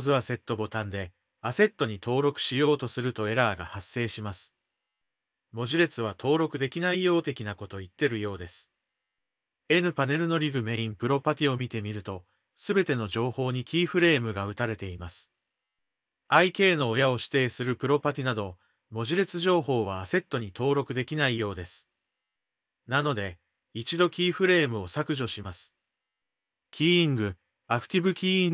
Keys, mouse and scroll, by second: 2.6-4.8 drag, 5.1 click, 12.4 click, 17.4 click, 18.0 click, 18.5-19.7 drag, 20.4-21.4 drag, 24.0 x, 26.4 a, 26.6 x.